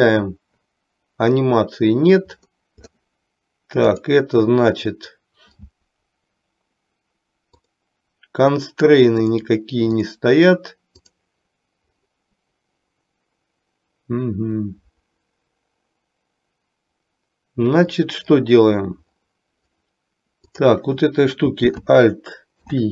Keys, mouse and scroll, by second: 0.0 click, 4.0 click, 10.0 click, 20.6 click, 22.6 alt+p.